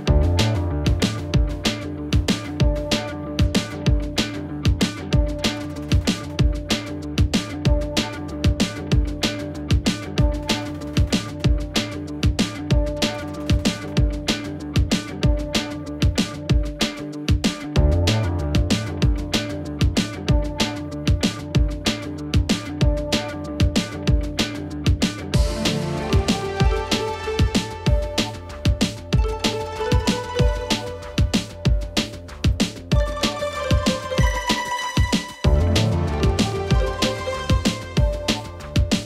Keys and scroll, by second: 0.6 ctrl+v, 2.7 s.